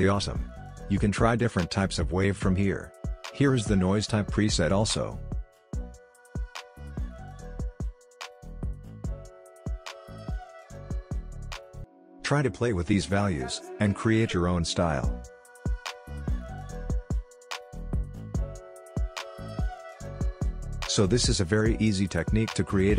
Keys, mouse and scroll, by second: 1.6 space, 2.3 click, 4.9-6.4 scroll up 1, 6.4-8.8 drag, 8.8-9.3 scroll down 1, 9.3-10.7 scroll up 1, 10.7-14.2 drag, 14.2 ctrl+z, 15.9-17.7 drag, 17.7-18.4 scroll down 1, 18.6 space, 20.4 space, 22.0-22.9 drag.